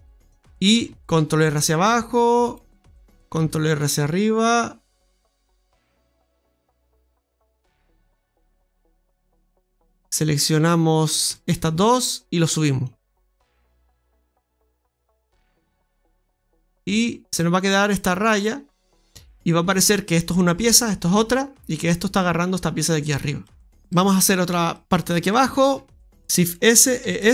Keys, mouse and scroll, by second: 1.1 ctrl+r, 3.3 ctrl+r, 7.1 g, 9.1-9.5 scroll up 1, 9.5 middle click, 11.2 alt+shift+right click, 12.7 click, 15.8 scroll down 2, 16.7 Tab, 16.9-17.2 scroll down 2, 17.3 middle click, 19.7 scroll down 1, 19.7 middle click, 23.0 scroll down 2, 23.4 middle click, 23.8 shift+middle click, 23.8-24.5 scroll up 2, 24.8 right click, 26.0 ctrl+z, 26.0 shift+s, 27.0 e.